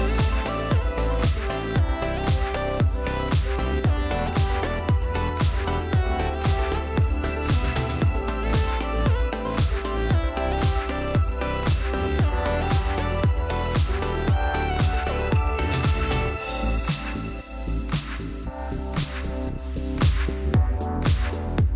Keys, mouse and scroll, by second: 3.2 click, 4.6-5.4 drag, 5.4 ctrl+z, 5.8 ctrl+click, 9.1 ctrl+d, 14.2 ctrl+z, 17.4 ctrl+shift+z, 17.9 ctrl+shift+click, 19.9 click.